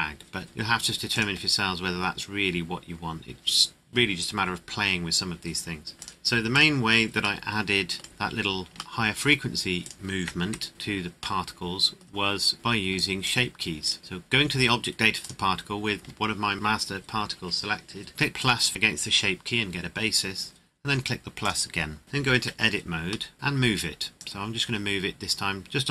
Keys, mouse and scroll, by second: 1.1 click, 6.0 click, 7.4 middle click, 8.0 scroll up 1, 9.0 shift+middle click, 9.8 right click, 10.4 KP_Decimal, 11.4 middle click, 12.2-12.5 scroll down 1, 12.5 right click, 12.9 click, 13.8 right click, 15.2 right click, 16.6 right click, 18.4 click, 21.4 click, 22.4 Tab, 23.3 middle click, 24.2 click.